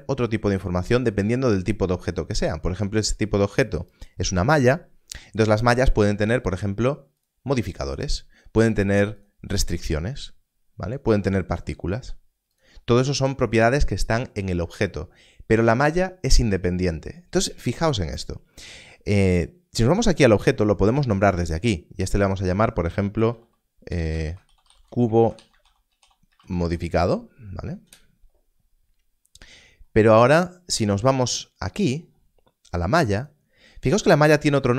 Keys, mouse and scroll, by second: 7.1 click, 11.5 click, 22.1 click, 23.1-26.6 typing, 27.8 Return, 30.1 Return, 33.1 click.